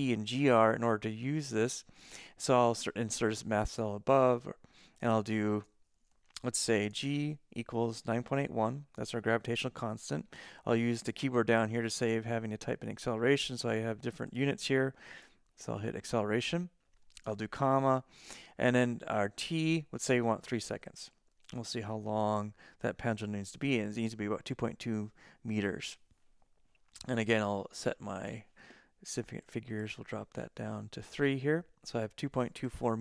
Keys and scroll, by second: 7.0-10.1 typing, 17.7 ,, 17.8 space, 19.5-23.4 typing, 30.1 3.